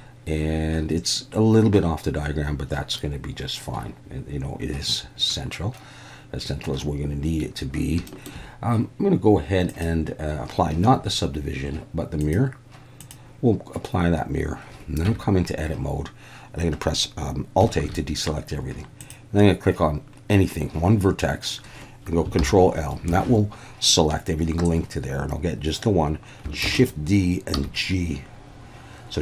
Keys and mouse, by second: 8.1 shift+middle drag, 9.7-11.1 drag, 12.3-13.1 drag, 15.1 Tab, 17.8 alt+a, 19.0 click, 22.4 ctrl+l, 26.6 shift+d, 26.7 click, 27.6 g.